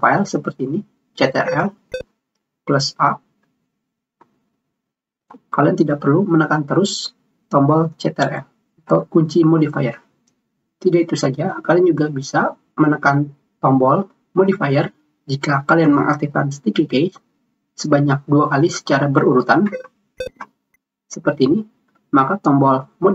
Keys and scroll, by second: 3.9 a.